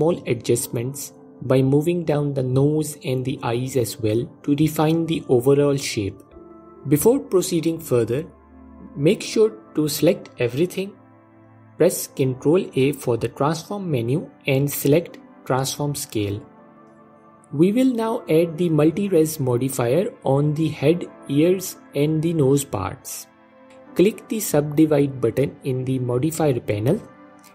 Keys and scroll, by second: 0.7 s, 1.3 s, 1.9 s, 11.7 ctrl+a.